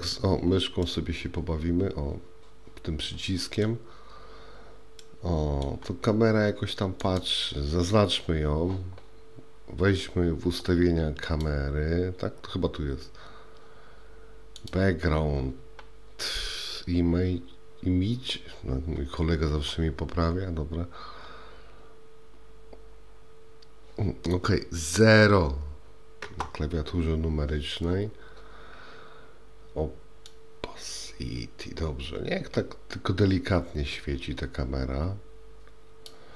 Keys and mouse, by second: 0.9-3.7 middle drag, 5.1-5.7 middle drag, 7.2 click, 11.3 click, 14.7 click, 26.3 KP_0, 30.5-36.2 drag.